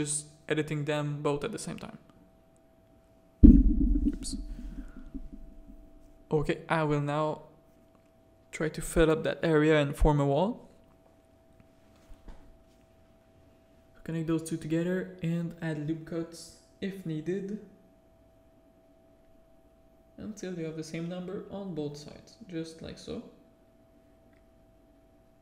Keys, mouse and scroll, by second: 0.1 /, 0.9-1.4 drag, 1.6 click, 1.9 shift+middle click, 2.2 shift+middle drag, 3.0 click, 3.2 Tab, 3.4 middle click, 3.9 z, 4.1 a, 4.7 1, 4.9 middle click, 6.7 middle click, 7.2 shift+middle click, 10.3 f, 10.5 middle click, 11.0 a, 11.2 middle click, 12.2 ctrl+r, 13.4 a, 14.2 2, 14.3 click, 14.6 f, 15.8 click, 16.2 f, 16.3 1, 16.6 a, 17.3 ctrl+r, 19.0 click, 19.3 g, 20.7-22.5 typing, 21.9 Tab, 23.0 alt+a, 23.7 click.